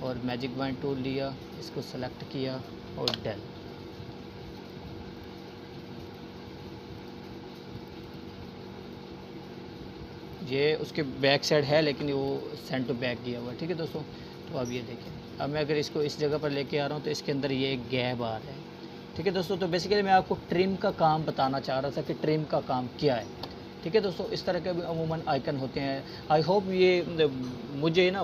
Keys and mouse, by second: 1.5 right click, 2.2-5.0 drag, 6.8-9.0 drag, 13.7-14.3 drag, 18.5-19.2 click, 19.5 right click, 20.6 click, 25.9-27.3 drag.